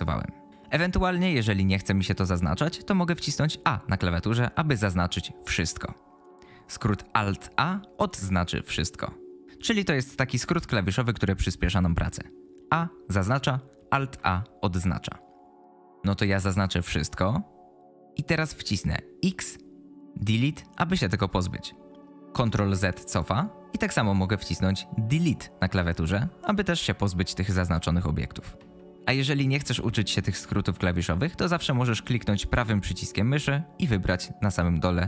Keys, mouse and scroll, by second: 3.5 a, 7.5 alt+a, 12.6 a, 13.9 a, 16.1 a, 19.2 x, 22.2 ctrl+z, 25.0 Delete, 28.6 ctrl+z, 32.4-35.0 right drag.